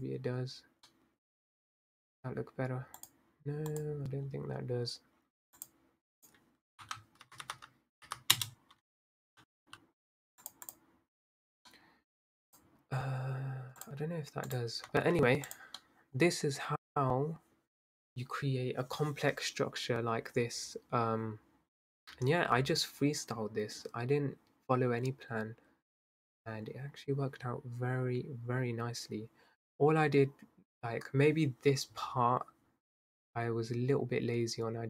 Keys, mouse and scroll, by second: 0.0 click, 0.8 scroll up 2, 0.9-1.9 middle drag, 1.9 scroll down 4, 3.3 click, 3.8 click, 8.4 0, 9.2-9.6 scroll up 3, 9.6 g, 10.7 click, 11.8 middle click, 12.5 click, 13.8-14.9 drag, 14.9-15.4 scroll down 8, 15.5 drag, 15.8-19.8 middle drag.